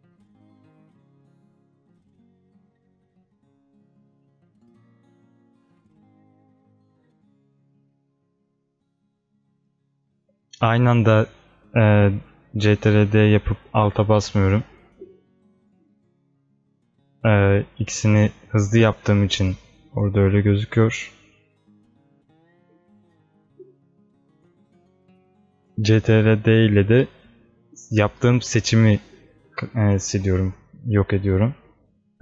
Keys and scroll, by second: 6.6 ctrl+d.